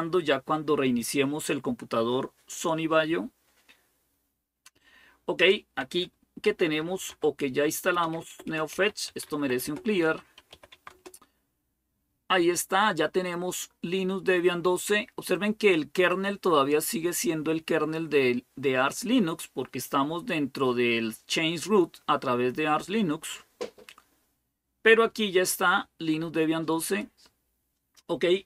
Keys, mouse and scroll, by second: 5.2 click, 5.8 click, 6.0-10.8 typing, 15.9-18.2 drag, 26.7-28.4 drag.